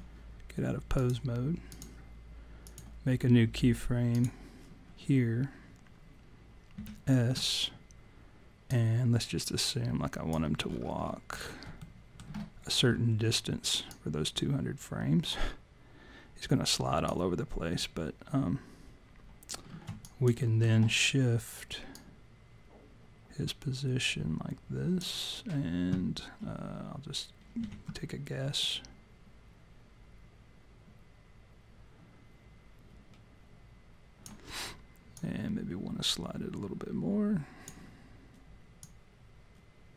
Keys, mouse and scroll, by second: 1.0 click, 2.7 click, 4.1 click, 6.8 s, 8.7 click, 10.7-11.8 scroll down 15, 11.8 alt+middle click, 12.7-13.1 scroll down 2, 13.9 click, 19.5-19.9 scroll down 4, 20.0 alt+click, 20.4 alt+middle click, 21.9 click, 27.6 s, 28.6 click, 35.2 click, 38.8 click.